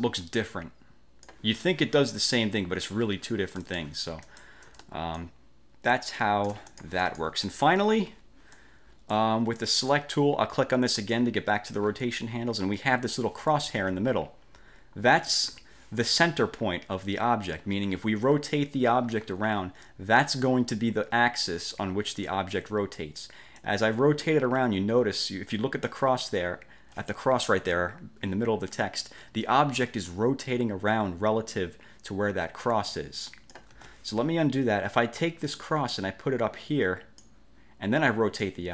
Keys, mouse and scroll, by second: 3.7 shift+click, 4.3 shift+click, 5.3-7.5 ctrl+shift+drag, 8.1 Delete, 8.7 click, 9.7 click, 11.1 click, 13.8-14.2 ctrl+scroll up 2, 15.5 click, 15.7 1, 23.7-33.8 drag, 33.9 ctrl+z, 35.7-37.5 drag, 38.5-38.7 drag.